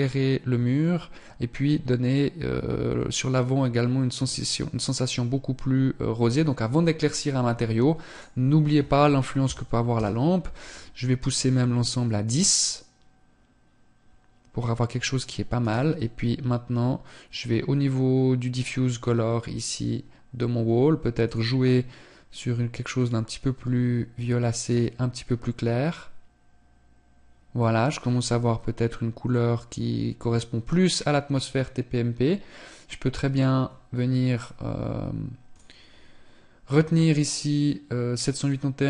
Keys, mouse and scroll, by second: 7.7 click, 15.2 right click, 20.9 click, 35.0 click.